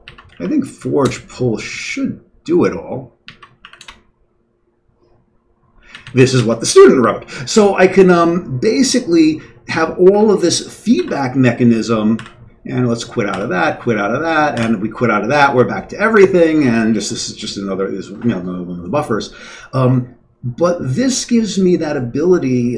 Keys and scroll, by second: 0.0-0.5 typing, 1.0 Return, 3.2 Down, 3.6 Up, 3.8 Return, 5.6 Down, 5.8 Down, 6.1 Down, 6.2 Down, 11.0 typing, 12.1 typing, 13.3 typing, 14.6 typing.